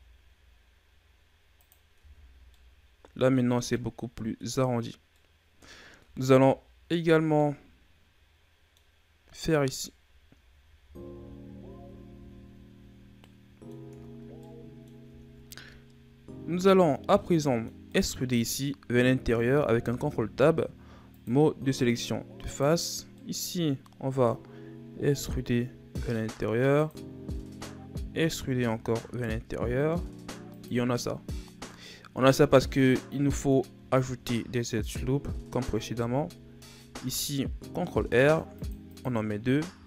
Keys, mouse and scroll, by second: 2.0 Tab, 2.3 scroll down 2, 2.5-5.7 middle drag, 5.7-6.0 scroll up 1, 6.0 Tab, 6.7-7.4 scroll up 1, 7.4-10.4 middle drag, 10.5 ctrl+z, 10.8 ctrl+z, 11.1 ctrl+z, 11.4 ctrl+z, 11.7 ctrl+z, 12.2 ctrl+z, 13.2 middle click, 13.9 Tab, 14.3 scroll down 1, 14.4 middle click, 15.1 Tab, 16.6-17.4 scroll up 1, 17.4 middle click, 17.9 right click, 19.8 ctrl+Tab, 22.5 right click, 23.2-24.9 middle drag, 24.9 e, 28.1 e, 31.1-34.0 middle drag, 34.0-35.9 scroll up 1, 35.9 ctrl+r.